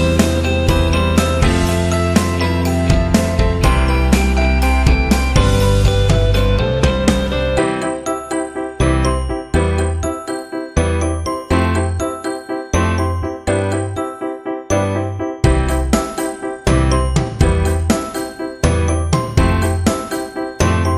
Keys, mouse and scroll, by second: 1.1 shift+z, 1.9 click, 2.9 g, 4.2 g, 5.7 click, 6.9 shift+z, 9.5 click, 11.2-12.5 middle drag, 14.7-16.1 middle drag, 18.4 shift+z, 19.1 click, 19.8 click.